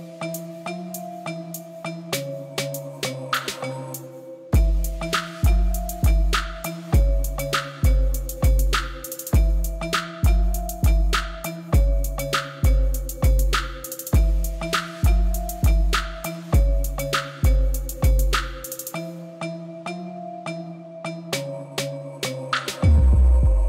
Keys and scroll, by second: 0.7 x, 12.6 Tab.